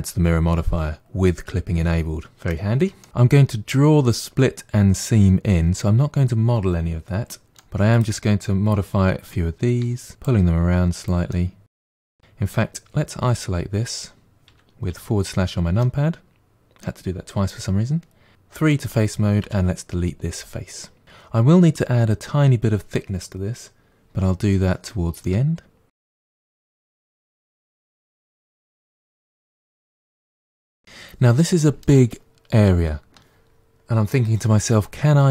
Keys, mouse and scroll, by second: 7.5 middle click, 7.9 click, 9.8 g, 10.6 middle click, 11.2 click, 11.8-13.4 middle drag, 13.4 KP_Divide, 14.5 KP_Divide, 14.9 KP_Divide, 15.8-18.3 middle drag, 18.3 3, 18.7 click, 19.5 Delete, 25.3 middle click, 26.2 1, 26.3 middle click, 26.5 click, 26.7 g, 26.9 middle click, 27.2 click, 27.4 middle click, 28.0 click, 28.2 middle click, 28.7 g, 29.0 middle click, 29.5 click, 29.7 middle click, 30.1 scroll down 1, 30.2-31.4 middle drag.